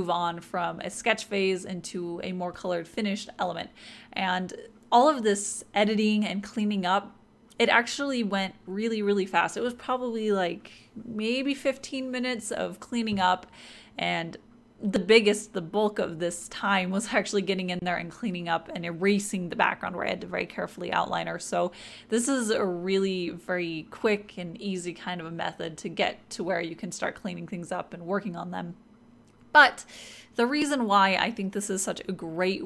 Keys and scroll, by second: 18.1-20.5 typing.